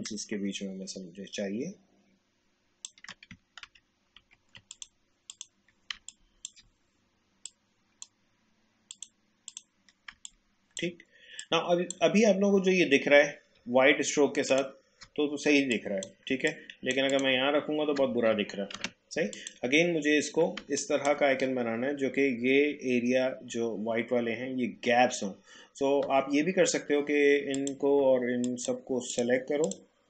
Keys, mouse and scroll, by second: 3.6 ctrl+d, 4.7 click, 5.9 space, 6.1 click, 6.4 space, 7.4-8.9 drag, 10.1 space, 10.2 click, 10.6 space, 11.4-13.7 drag, 13.7 alt+scroll down 1, 14.5-17.1 drag, 18.7 ctrl+z, 19.3 click, 20.0-20.4 alt+scroll up 1, 20.6 space, 20.8 click, 21.1 space, 27.5 click, 28.4 shift+click.